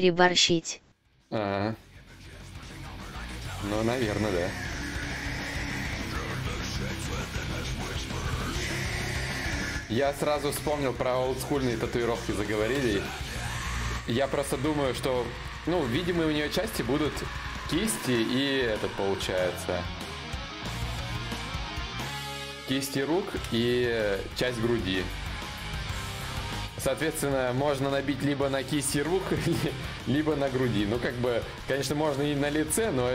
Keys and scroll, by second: 1.6 ctrl+z, 30.7 shift+d, 31.7 shift+d.